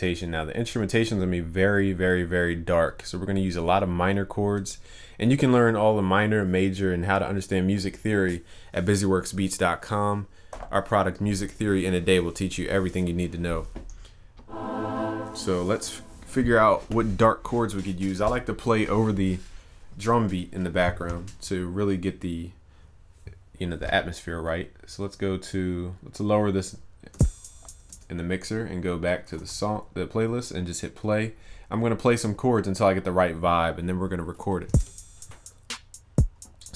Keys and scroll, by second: 29.5 ctrl+s.